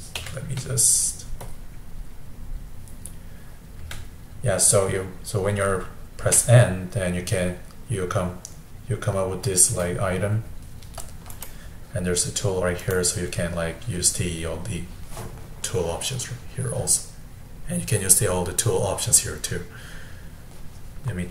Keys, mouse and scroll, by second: 0.2 n, 1.5 click, 3.8 n, 6.2 n, 11.3 click, 12.8 click.